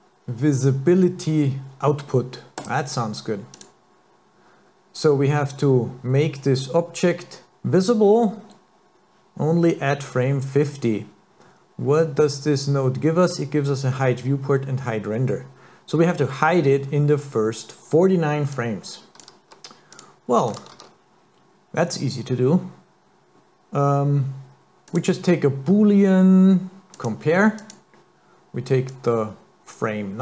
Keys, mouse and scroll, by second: 11.9 scroll up 2, 15.1-16.9 scroll down 1, 16.9 scroll down 1, 18.5 click, 19.9 click, 20.5 click, 20.7 shift+a, 28.9 click.